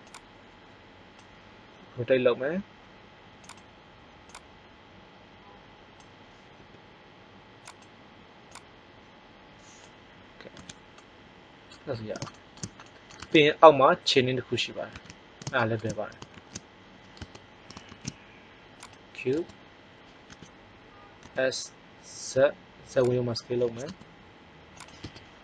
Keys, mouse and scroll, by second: 1.7 r, 4.1 click, 6.5 r, 7.7 click, 10.5 z, 15.6 middle click, 16.2 shift+a, 17.1 Tab, 17.8 shift+a, 19.2 Tab, 20.2 s, 23.0 click, 23.6 s, 24.9 KP_1.